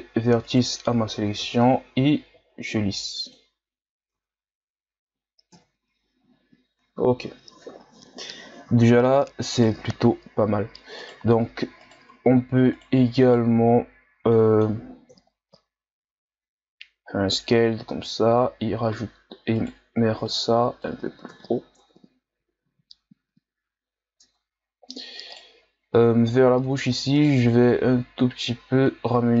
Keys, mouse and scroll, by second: 0.4 shift+right click, 1.3 x, 2.3 w, 4.2 Tab, 5.5 KP_1, 6.6-7.2 scroll down 2, 7.8-8.4 shift+scroll down 1, 8.4-8.7 scroll up 1, 8.7 shift+scroll down 1, 9.0-9.5 scroll up 1, 9.5 right click, 9.8 Tab, 11.0 right click, 11.8 shift+right click, 12.7 shift+right click, 13.2 shift+right click, 14.3 middle click, 15.1 KP_3, 16.1 s, 20.2-21.3 drag, 21.3 KP_1, 21.8 Tab, 22.6 a, 23.0-23.6 scroll down 2, 23.6-24.3 scroll up 2, 24.3 Tab, 24.6-25.3 scroll up 1, 25.3 right click, 25.9-27.1 drag, 27.1 right click, 27.6-29.4 drag.